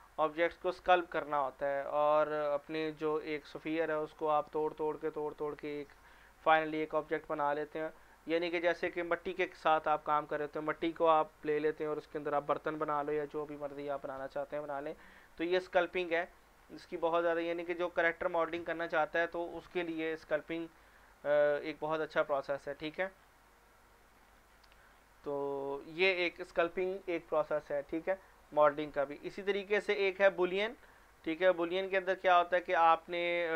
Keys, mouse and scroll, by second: 0.6 scroll down 1, 1.3 scroll down 1, 3.7 scroll down 1, 7.0 scroll down 1, 7.6 scroll down 1, 13.9 scroll down 1, 15.6 click, 15.9 scroll down 1, 17.6 click, 22.8 scroll down 1, 24.5 scroll up 1, 24.9 scroll down 1, 27.2 click, 30.9 click, 32.2 click.